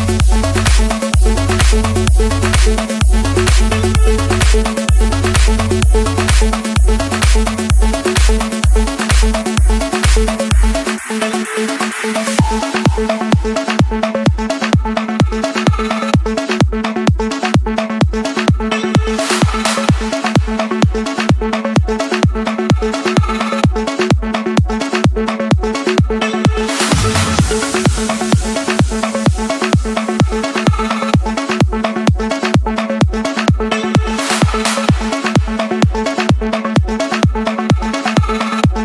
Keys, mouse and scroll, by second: 0.0 Return, 1.0 Escape, 1.0 typing, 2.6-4.6 drag, 5.8 click, 6.2-6.6 scroll, 8.3 click, 8.8-9.5 scroll, 9.8 click, 10.1-10.5 scroll, 11.3 click, 11.9 Escape, 12.7-14.2 typing, 14.9 Return, 16.0-17.0 drag, 17.8 typing, 18.2 Return, 19.7-20.8 drag, 20.9 typing, 21.3 Return, 22.2-23.3 drag, 23.3 typing, 23.7 Return, 26.1 Return, 27.5 typing, 28.1 Return, 30.5-31.7 drag, 32.4 typing, 33.2 Return, 34.8-36.8 typing, 37.0 Return, 38.7-38.8 drag.